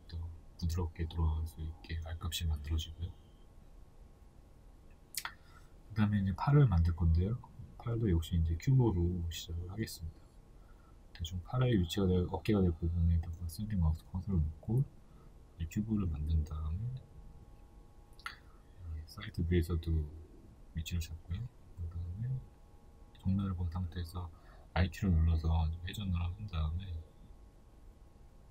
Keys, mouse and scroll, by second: 0.7 KP_1, 2.1 scroll down 1, 3.5-5.0 scroll up 2, 5.0 click, 5.7-6.4 shift+middle drag, 6.4 click, 7.1-14.8 shift+middle drag, 8.8 shift+a, 10.2 s, 12.5 scroll up 2, 13.3 g, 14.8 click, 16.0 KP_3, 16.5 scroll down 1, 17.4 g, 19.7 KP_1, 20.7-28.4 shift+middle drag, 22.8 r, 28.4 Tab.